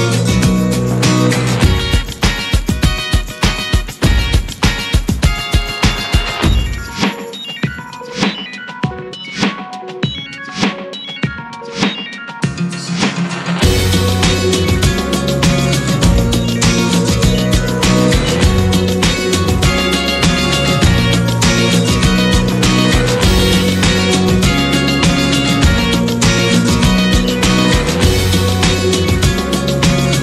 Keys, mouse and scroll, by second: 0.7 ctrl+1, 1.1 drag, 1.4 scroll down 1, 1.7-2.2 middle drag, 2.2 click, 2.4 scroll down 3, 3.0 scroll down 1, 3.2 shift+middle click, 3.4 s, 4.3 scroll down 3, 4.9-5.6 shift+middle drag, 5.6 click, 7.3-7.7 scroll down 1, 7.7-8.4 shift+middle drag, 8.4 click, 9.1 click, 9.9 shift+middle click, 10.1-10.6 scroll up 6, 10.6-11.1 middle drag, 11.1 click, 11.3 shift+middle drag, 11.5 scroll up 1, 11.6 drag, 11.8 `, 12.6 `, 13.6 `, 14.6 drag, 15.1 `, 15.7-16.3 middle drag, 16.3 shift+scroll up 2, 16.5 drag, 16.8-19.6 middle drag, 19.6 scroll down 5, 19.8-21.3 middle drag, 21.3-23.8 drag, 25.4-30.2 drag.